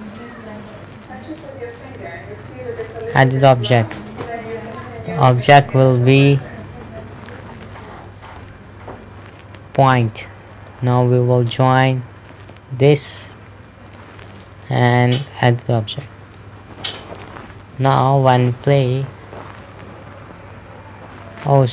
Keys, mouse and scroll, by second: 3.6 click, 10.4 click, 14.4 click, 18.0 KP_0, 18.7 p.